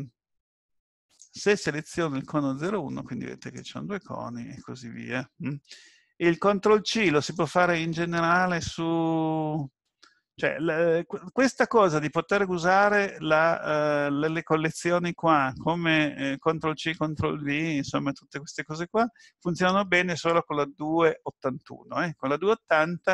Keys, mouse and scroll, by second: 1.1 click, 2.7 click, 7.3 click.